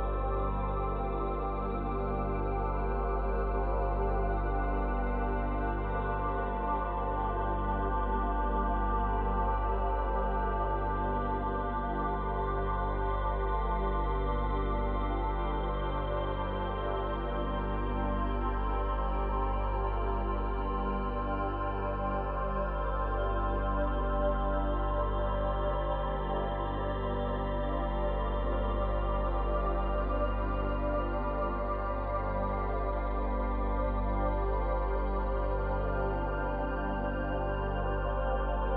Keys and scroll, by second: 2.3 space, 7.4 space, 12.8 space, 23.3 space, 28.6 space, 31.0 ctrl+z, 35.3 ctrl+z.